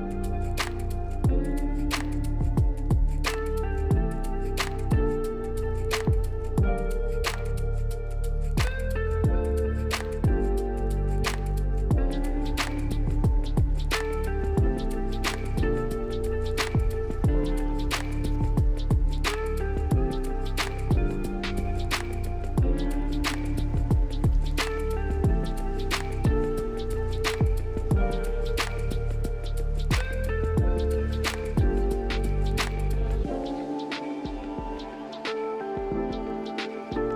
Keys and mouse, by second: 0.1 click, 1.1 drag, 1.4 click, 1.7 click, 1.9 click, 2.2 click, 2.4 click, 2.7 click, 3.1 click, 3.5 click, 4.2 click, 4.9 click, 5.3 click, 6.0 click, 6.9 click, 7.2 click, 7.6 click, 8.3 click, 8.9 click, 9.1 click, 10.4-11.5 drag, 11.8-13.3 drag, 14.1 click, 15.4 click, 17.0 drag, 18.9-20.2 drag, 21.2-21.7 drag, 22.3-22.7 drag, 22.8 click, 23.2-23.6 drag, 23.8 click, 28.1 ctrl+l, 30.2-31.4 drag, 32.7 click, 34.7 click, 36.2 click, 36.5-37.0 drag.